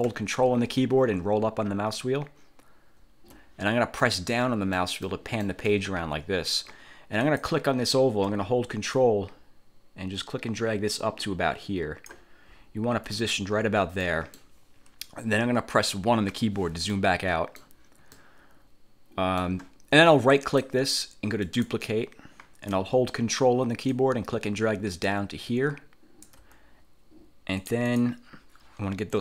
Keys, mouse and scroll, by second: 1.7-3.4 ctrl+scroll up 4, 4.2 click, 5.3 click, 6.0 click, 7.4 click, 9.1-12.4 ctrl+drag, 12.6-13.0 ctrl+scroll up 2, 14.2 click, 16.4 1, 17.0 click, 18.3-19.7 drag, 20.4 click, 21.6 click, 24.0-26.6 ctrl+drag, 27.7 click.